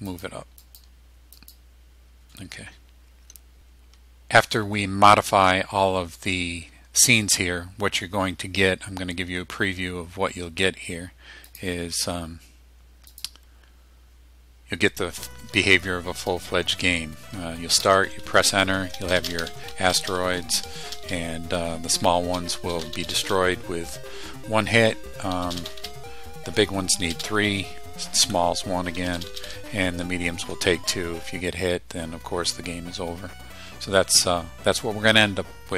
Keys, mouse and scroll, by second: 0.1 click, 0.7 click, 1.4 click, 11.5 click, 13.1 click, 17.9 Return, 18.5 Left, 19.2 space, 22.0 Right, 22.3 space, 23.3 Left, 23.4 space, 23.7 Left, 24.7 Right, 25.4 space, 26.1 Left, 27.1 space, 27.7 Right, 28.4 Left, 29.0 space, 30.4 Left.